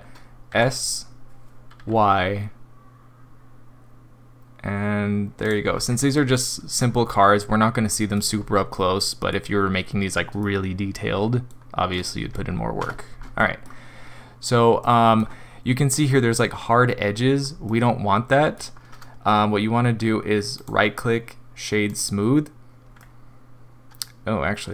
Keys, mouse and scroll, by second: 0.5 s, 5.7-6.1 scroll down 2, 6.2 middle click, 6.9 scroll down 2, 7.5 scroll down 2, 7.9 middle click, 8.3 scroll up 3, 8.7 middle click, 9.5 middle click, 9.5-10.2 scroll up 2, 10.4 middle click, 11.6 scroll down 1, 12.8 Tab, 13.4 middle click, 14.8 middle click, 15.0 middle click, 17.7 middle click, 18.2 middle click, 20.6 right click, 23.0 middle click.